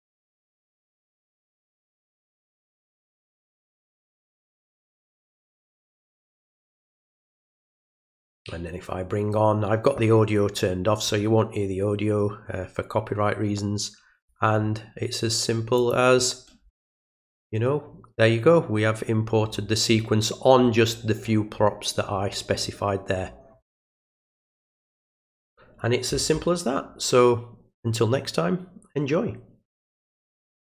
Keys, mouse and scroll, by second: 8.2-14.3 drag, 15.8 click, 30.5 click.